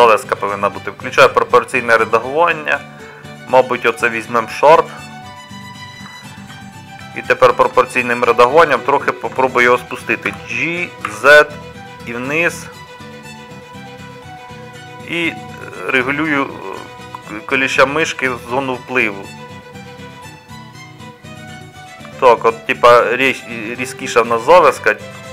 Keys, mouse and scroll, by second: 8.0 middle click, 10.5 g, 17.3-22.7 middle drag.